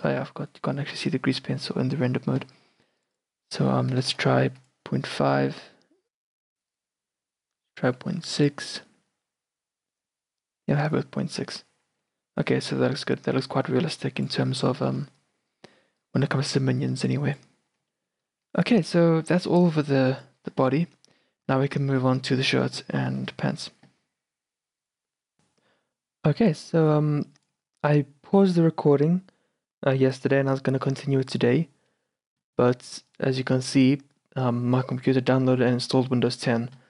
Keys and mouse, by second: 0.6-2.4 drag, 0.9 n, 3.1-5.0 drag, 4.2 BackSpace, 6.7-10.0 drag, 12.9-14.3 middle drag, 13.0 shift+b, 15.0 shift+b, 17.9-21.6 middle drag, 18.5 shift+b, 21.8-22.9 middle drag.